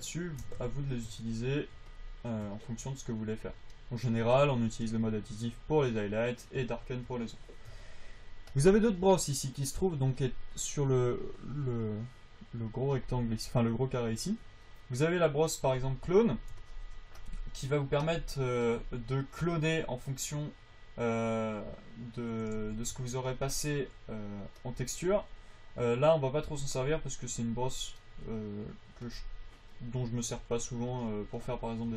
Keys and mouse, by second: 17.0-19.4 drag, 23.6 v, 23.6 f.